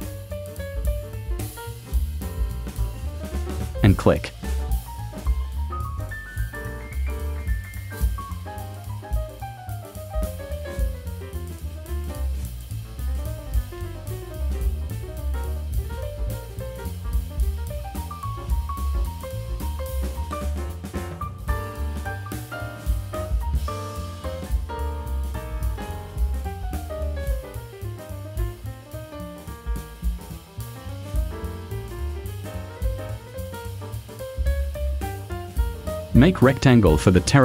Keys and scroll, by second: 20.8 shift+m, 33.8 v.